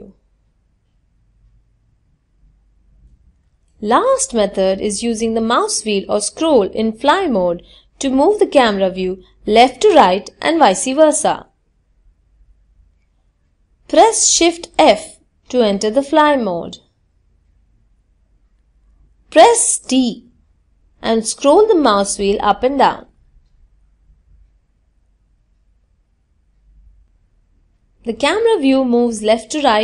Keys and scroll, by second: 12.0 shift+f, 18.8 d.